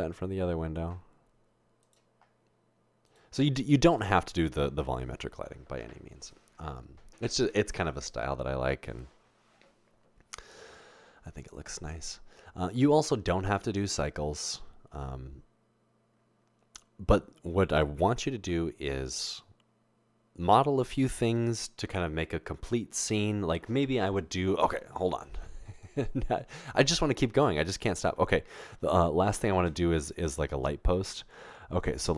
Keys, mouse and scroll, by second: 29.7 a.